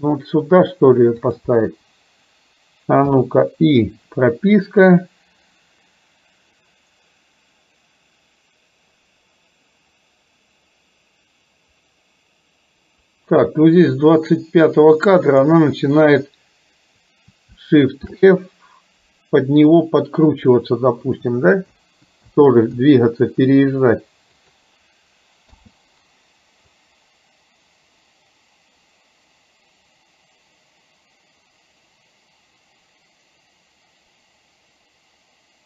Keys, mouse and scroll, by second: 3.2 i, 5.1-15.6 drag, 18.1 shift+f, 25.6 i, 26.8-35.6 drag.